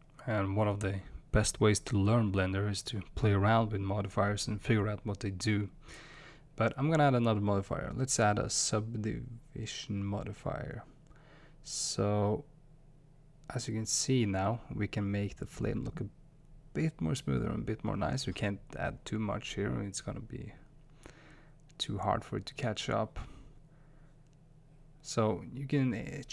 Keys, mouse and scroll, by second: 15.5-24.6 drag.